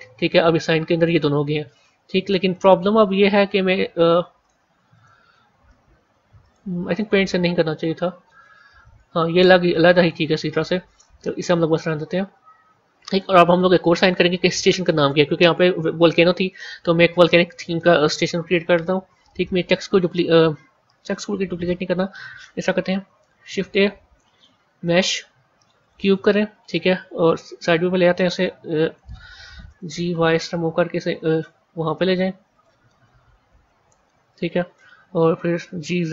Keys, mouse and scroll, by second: 0.9 click, 1.6 click, 2.3 click, 3.1 r, 4.8 click, 5.6 r, 7.0 ctrl+z, 8.6 ctrl+z, 9.9 click, 10.8 click, 12.1 a, 13.3-16.4 middle drag, 18.3 KP_3, 19.6 click, 21.0 a, 23.1 shift+a, 27.2 KP_1, 28.3-29.6 middle drag, 29.6 g, 32.8-35.6 middle drag, 35.6 g.